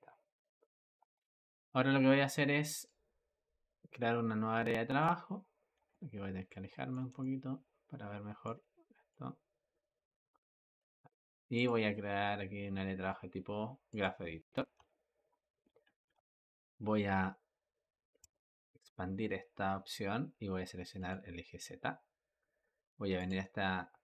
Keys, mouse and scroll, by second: 0.9 Escape, 2.7-5.8 drag, 5.8-9.0 ctrl+middle drag, 9.0-14.5 drag, 14.8-18.1 ctrl+middle drag, 18.1 click, 20.8 click, 23.0-24.0 drag.